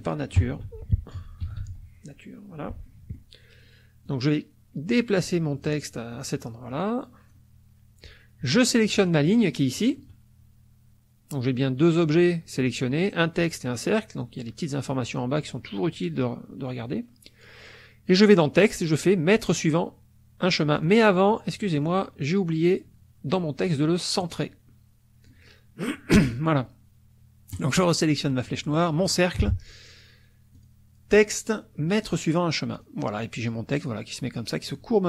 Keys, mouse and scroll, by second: 0.1-2.1 typing, 2.7 F1, 2.9 middle click, 4.1-5.8 drag, 5.9 middle click, 6.7 click, 9.0 shift+click, 18.3 click, 20.8 click, 21.5 click, 24.2-25.4 drag, 27.5 click, 29.1 shift+click, 30.5 click, 32.0 click, 32.7 click.